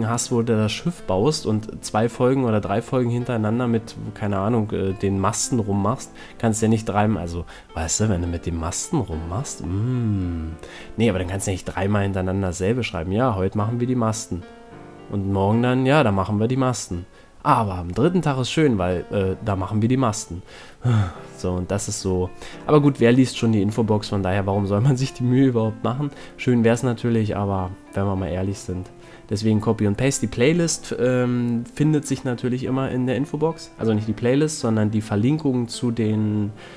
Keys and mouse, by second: 0.3 z, 0.5 Tab, 5.2 middle click, 9.4-11.3 middle drag, 12.5 KP_5, 15.5 middle click, 16.3-18.1 middle drag, 19.1 middle click, 20.6 a, 21.7 middle click, 25.5 Tab, 26.2 ctrl+r, 31.9 middle click, 33.2 middle click, 34.2-36.7 middle drag.